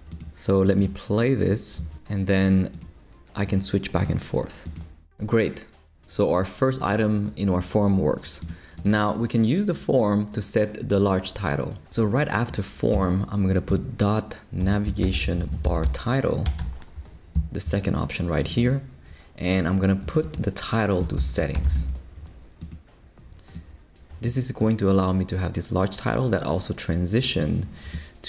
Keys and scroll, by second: 12.9 Return, 13.7-17.1 typing, 17.3 Down, 20.1-22.2 typing.